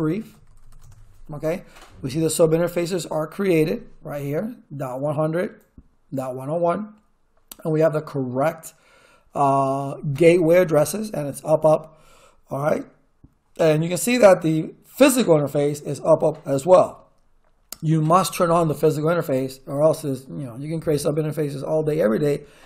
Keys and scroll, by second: 0.0-1.2 typing.